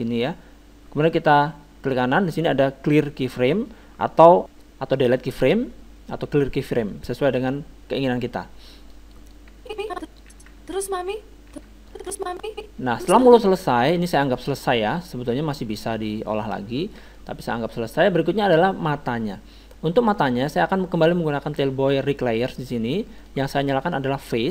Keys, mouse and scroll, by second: 0.0-1.7 drag, 1.9-3.9 right drag, 9.3-11.0 drag, 10.3 alt+a, 11.9 alt+a, 11.9-13.5 drag, 14.2-17.2 drag, 17.2-18.9 middle drag, 20.2-21.9 drag, 24.2-24.5 drag.